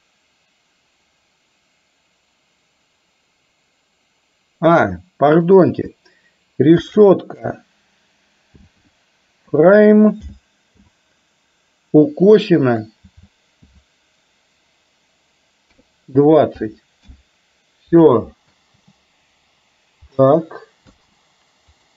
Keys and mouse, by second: 18.6 space, 21.0 space, 21.8-21.9 drag.